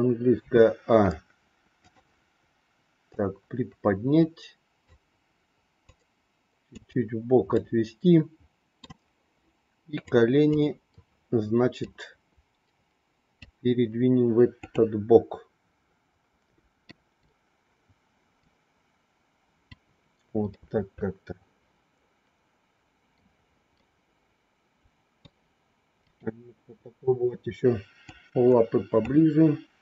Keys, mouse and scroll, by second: 0.3 a, 1.7 click, 3.0-4.9 drag, 5.9 click, 7.4 scroll up 1, 7.6-8.8 middle drag, 10.1 click, 11.8-13.4 drag, 14.4 click, 17.0 click, 18.3-19.6 drag, 20.5-23.1 middle drag, 23.8 scroll up 1, 24.0-25.1 middle drag, 28.0 click.